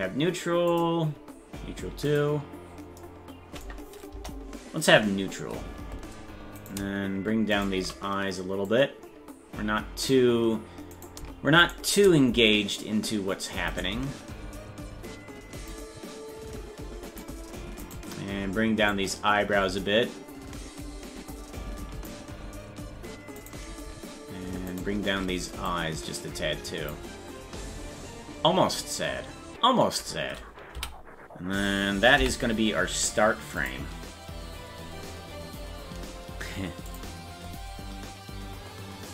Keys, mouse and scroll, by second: 0.7 click, 0.7 scroll up 1, 2.1 click, 4.1 KP_0, 6.7-8.7 right drag, 8.7-10.1 drag, 11.2 right click, 11.8 shift+right click, 13.9 right click, 15.7-17.2 drag, 18.0 right click, 18.9-22.1 drag, 23.6 right click, 24.9 shift+right click, 25.7-26.8 drag.